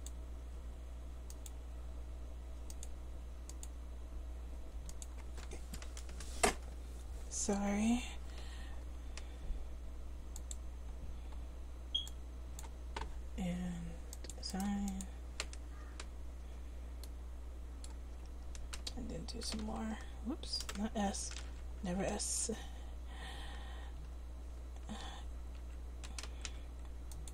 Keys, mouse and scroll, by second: 14.7 right click, 15.0 middle click, 15.8 Tab, 18.2 Tab, 19.6 s, 21.4 ctrl+z, 21.9 a, 25.0 a, 25.6 a, 26.5 c.